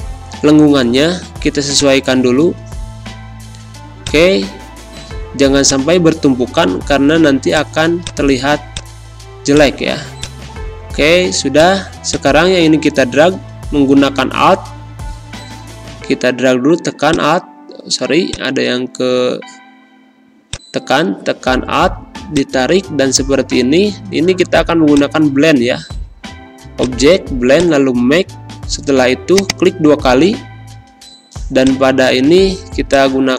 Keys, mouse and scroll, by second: 5.3 space, 5.6 click, 5.8 space, 7.4 click, 8.2-12.2 typing, 8.6 click, 9.4 click, 10.1 click, 11.5 click, 12.0 click, 13.8 \, 17.1 click, 19.2 v, 20.4-33.3 alt+drag.